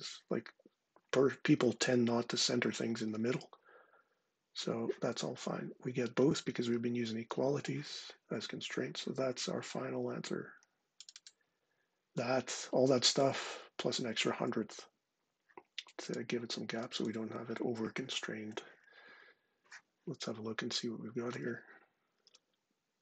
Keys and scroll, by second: 21.9 ctrl+5.